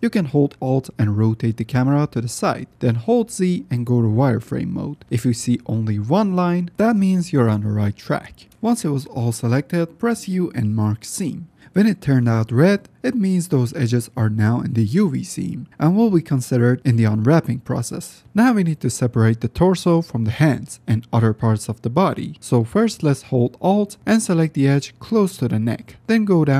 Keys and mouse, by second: 0.3 middle click, 0.9 click, 1.1 middle click, 1.7 alt+click, 2.9 z, 5.5 shift+middle click, 7.7-8.0 shift+drag, 8.5 z, 8.8-9.2 shift+middle drag, 9.9 u, 14.4-14.7 shift+middle drag, 15.3 shift+middle click, 15.7 middle click, 16.7-17.1 shift+drag, 17.4 shift+drag, 21.9-22.3 shift+drag, 22.1 shift+middle click, 26.0 click.